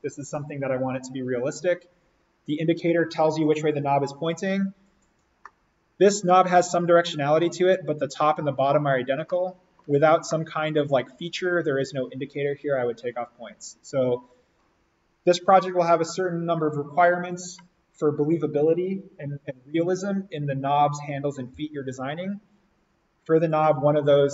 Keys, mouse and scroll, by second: 4.8-5.3 scroll down 1, 5.3-15.0 middle drag.